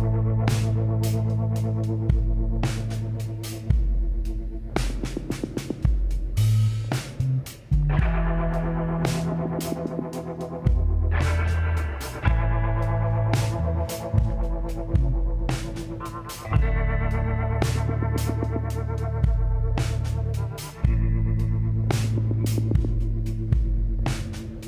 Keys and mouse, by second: 0.3 t, 1.6 t, 4.4 f, 6.5 r, 9.3 r, 12.3 s, 14.1 KP_1, 14.5-17.2 middle drag, 16.6 g, 18.6 s, 20.9-23.7 drag, 21.7 f, 23.7 g.